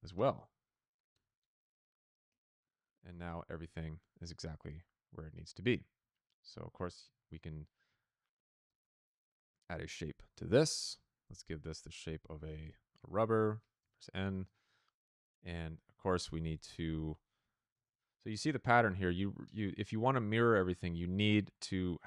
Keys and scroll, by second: 0.0-0.6 typing, 1.0 Return, 3.0 typing, 6.4 Tab, 6.7 s, 7.2 e, 7.8 Down, 8.6 Return, 10.0 p, 12.1-13.7 typing, 16.8 ctrl+c, 18.5 s, 19.1 Return.